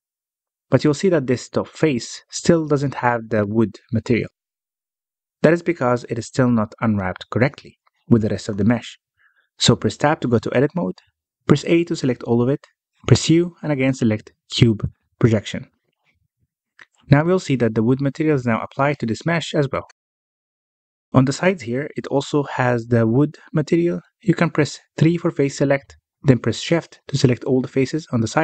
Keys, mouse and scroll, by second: 0.9 Tab, 1.3 Tab, 2.3 Tab, 2.6 3, 2.8 click, 4.5 click, 5.5 click, 6.3 a, 11.8 Tab, 12.0 Tab, 13.4 a, 14.5 u, 18.7 Tab, 19.0-20.5 scroll up 1, 20.5-21.1 scroll down 4, 21.1-25.0 middle drag, 25.0 scroll up 1, 25.3 Tab, 25.5 3, 25.8 click, 26.4 shift+click, 26.7 middle click, 27.7 shift+click, 28.2 shift+click.